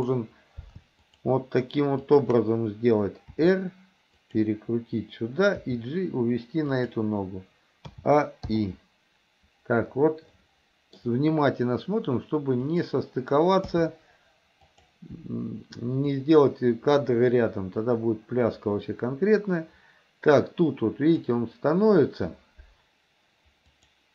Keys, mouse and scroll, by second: 2.0 shift+click, 3.4 r, 5.7 g, 8.0 a, 8.6 i, 10.4 middle click, 12.7 click, 13.7 g, 16.2-21.4 drag, 23.7 click.